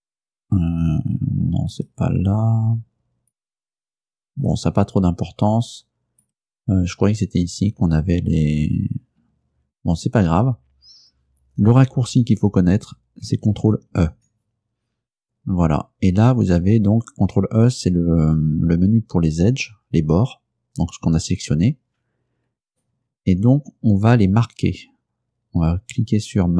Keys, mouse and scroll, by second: 0.2 click, 1.8 click, 3.4 click, 4.4 click, 6.3 click, 9.0-10.0 scroll up 2, 14.0 ctrl+e, 23.3 ctrl+e.